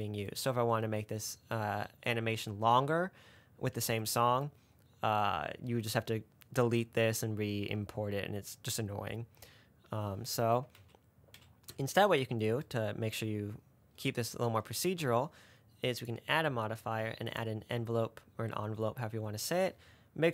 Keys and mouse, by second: 11.0 ctrl+z, 11.6 ctrl+z, 16.4-18.0 drag.